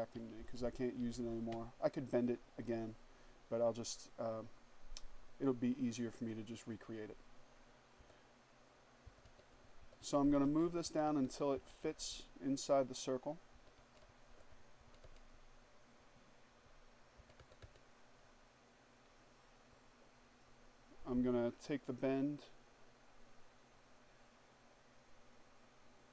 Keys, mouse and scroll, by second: 0.1 Up, 5.8 click, 7.1 Down, 8.1 Down, 10.6 Left, 12.6 Down, 16.3 Down, 20.6 click, 24.7-26.1 drag.